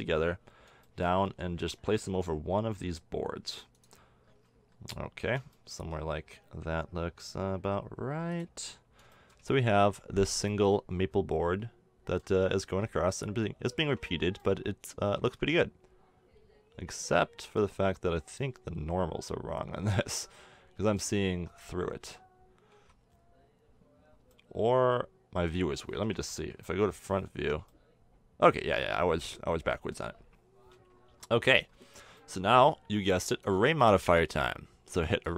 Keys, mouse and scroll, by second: 1.2 s, 6.3 s, 9.4 a, 13.7 a, 13.8 Tab, 17.8 middle click, 19.7 middle click, 21.3 Tab, 21.9 a, 22.8 a, 23.4-25.3 middle drag, 26.1 KP_1, 27.4 Tab, 31.4 KP_1.